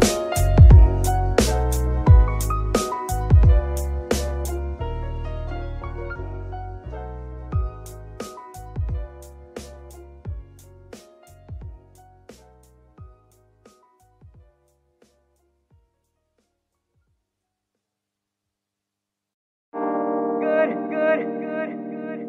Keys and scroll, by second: 0.4 Escape, 9.6 g, 9.8 y, 10.9 Escape, 14.2 g, 14.4 y, 16.8 Escape, 18.4 z.